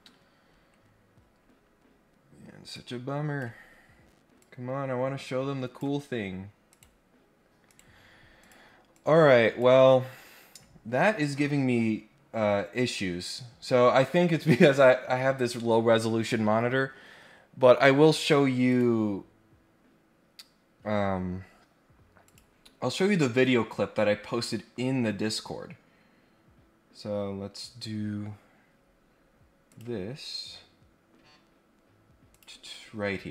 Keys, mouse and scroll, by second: 2.7 click, 4.3-5.7 drag, 6.6 right click, 7.6 right click, 8.4 click, 8.9 click, 18.6 click, 22.2 click, 29.7 click, 32.3 click, 33.2-33.3 scroll down 3.